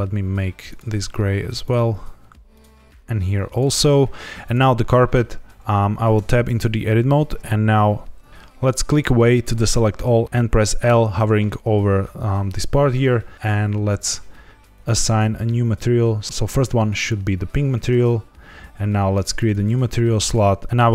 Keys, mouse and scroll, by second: 1.6 click, 2.4 click, 4.4 click, 6.1 Tab, 8.3 ctrl+z, 8.3 click, 8.8 click, 14.7 click, 19.3 click, 20.6 ctrl+z.